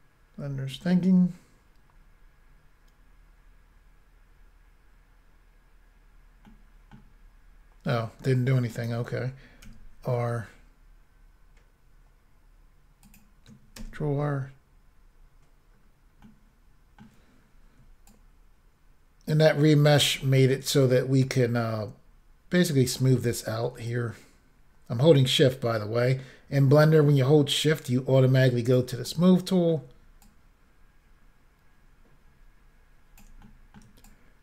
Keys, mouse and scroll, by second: 1.3-2.6 scroll down 1, 6.5 middle click, 7.2-7.5 scroll up 1, 8.8 right click, 9.7 r, 13.1 click, 14.1 ctrl+r, 15.8-16.3 scroll down 2, 16.3 middle click, 17.3-17.6 scroll up 2, 18.1 shift+click, 20.3 middle click, 20.9 shift+click, 23.2 middle click, 23.9 shift+click, 29.1 middle click, 30.3 shift+click, 33.5 middle click, 34.1 shift+click.